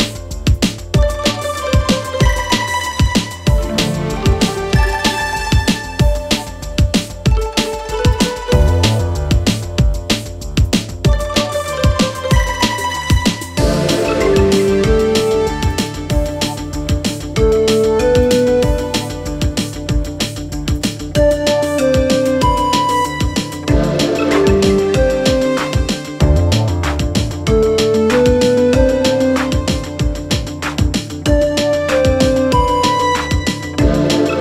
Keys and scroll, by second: 10.7 Escape, 24.2-25.4 typing.